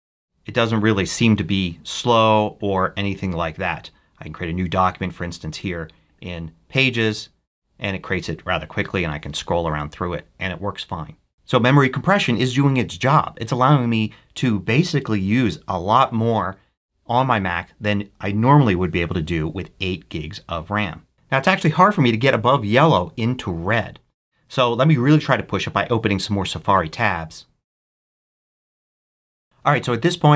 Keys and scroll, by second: 10.1 super+h, 26.7 super+t, 26.9-27.8 typing.